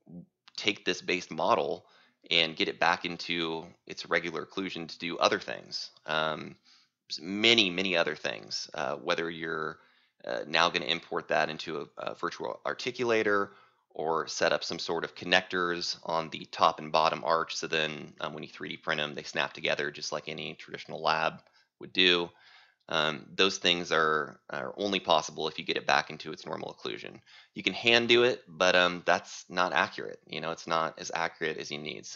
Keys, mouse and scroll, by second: 3.0 t, 7.1 click, 8.6-30.8 drag.